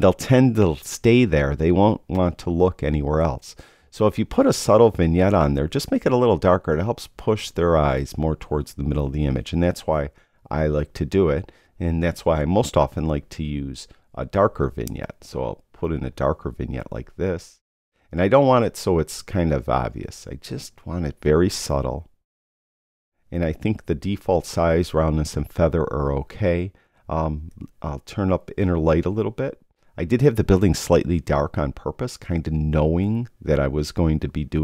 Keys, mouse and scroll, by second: 27.6 click.